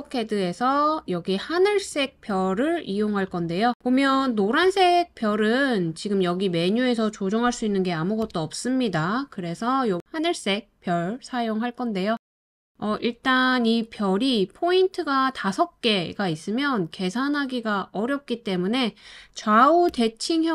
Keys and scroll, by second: 7.7 BackSpace, 19.9 8.